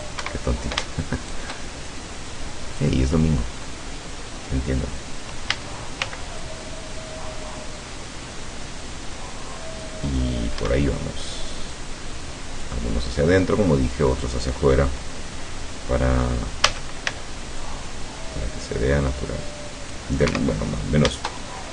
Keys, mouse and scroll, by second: 0.3 Escape, 1.2 shift+middle click, 2.0-3.0 shift+drag, 3.6 scroll up 1, 5.5 a, 6.1 c, 6.4-10.1 drag, 10.6 Escape, 11.8-12.9 drag, 13.0-13.3 scroll down 2, 16.8 a, 17.1 c, 17.7-20.2 drag, 20.4 Escape, 20.8-21.1 scroll up 1, 21.6 shift+scroll down 1.